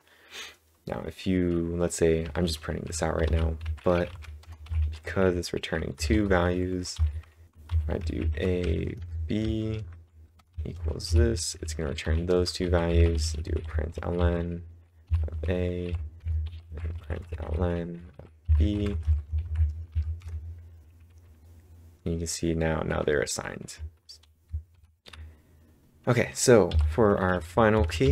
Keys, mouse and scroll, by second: 2.0-4.6 typing, 6.0-14.0 typing, 12.3 Return, 16.6-19.7 typing, 19.9 Up, 20.2 Return, 24.2-25.2 typing, 26.7 typing, 27.8 ctrl+v, 28.0 w.